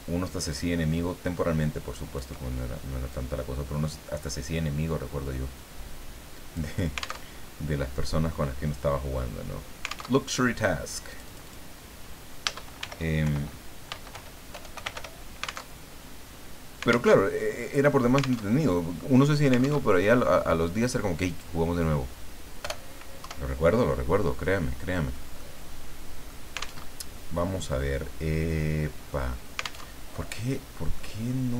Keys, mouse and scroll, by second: 3.1-6.7 drag, 7.3 alt+Tab, 10.1 alt+Tab, 11.1 click, 12.8-15.4 typing, 15.8 alt+Tab, 17.1 alt+Tab, 18.5 alt+Tab, 19.8 alt+Tab, 21.3 click, 22.6 BackSpace, 23.3 KP_1, 24.4 middle click, 25.4-26.4 middle drag, 26.8 alt+Tab, 29.9 alt+Tab, 30.4-30.9 scroll down 2, 30.9 middle click.